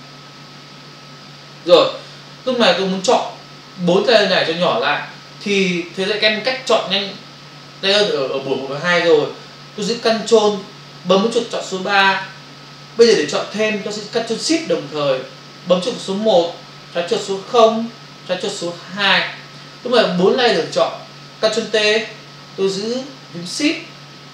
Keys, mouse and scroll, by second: 12.2 ctrl+click.